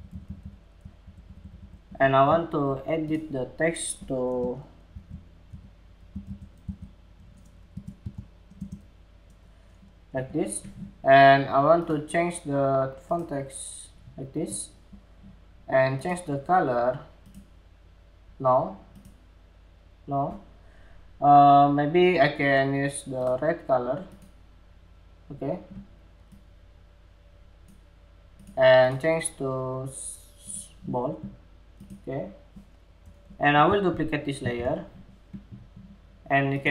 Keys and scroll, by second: 10.1 Escape, 33.4 super+c, 33.9 super+v.